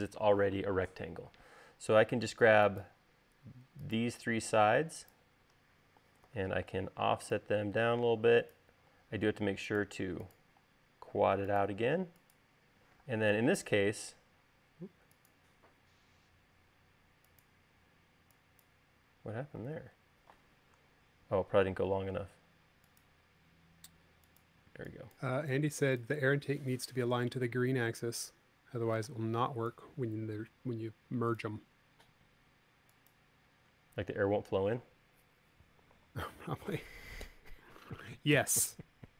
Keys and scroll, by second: 6.4 f, 9.1 l, 10.8 l, 13.1 p, 14.2 l, 18.1 e, 20.2 super+z, 22.2 l, 25.2 e, 29.4 p, 32.7 e.